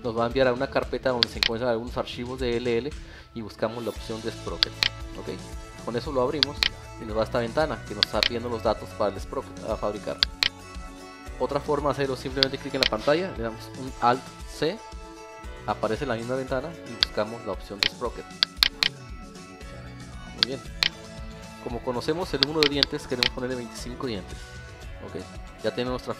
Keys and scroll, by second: 14.6 alt+c.